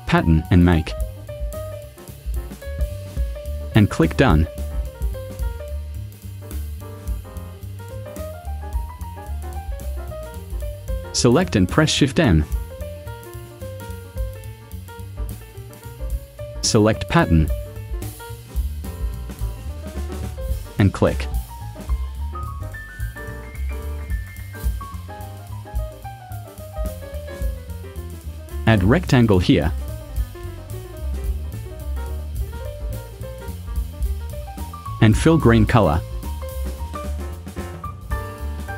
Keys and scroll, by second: 10.5 v, 13.0 shift+m, 23.3 v.